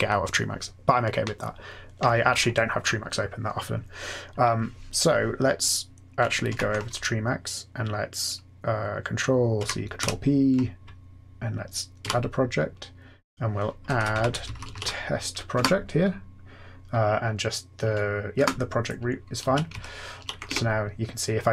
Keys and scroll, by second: 6.5 ctrl+F8, 9.5 ctrl+c, 9.9 ctrl+p, 12.0 a, 13.5-15.2 typing, 15.5 Return, 18.3 Return, 19.3 Down, 19.6 Up, 20.1 Down, 20.4 Tab.